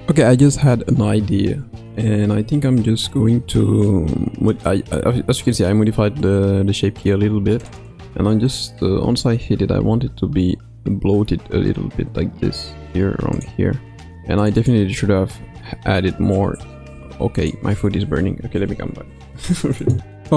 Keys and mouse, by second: 2.7-5.0 middle drag, 5.6-7.1 middle drag, 7.6 click, 8.4 middle click, 9.7 s, 15.4 s.